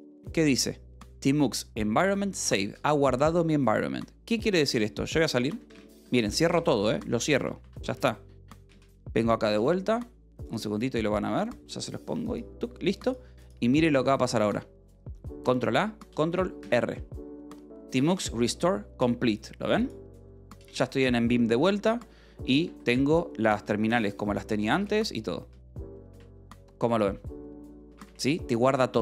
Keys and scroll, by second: 4.8-8.2 typing, 8.7 Return, 15.9 ctrl+a, 17.1 ctrl+r, 21.0 k, 23.2 ctrl+a, 24.0 n, 24.8 n, 25.5 k, 26.1 :, 28.0 Return.